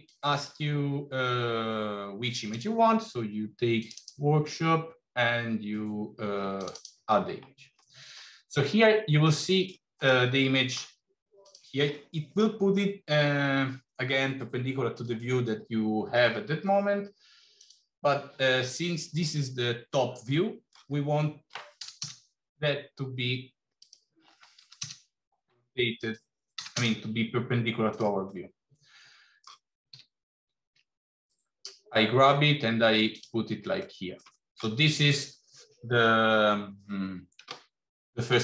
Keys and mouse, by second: 9.1 middle click, 9.9 middle click, 11.2 click, 17.5-22.8 drag, 23.6-25.3 drag, 25.8-27.3 drag, 28.3-29.3 middle drag, 29.8 g, 33.8 shift+middle click.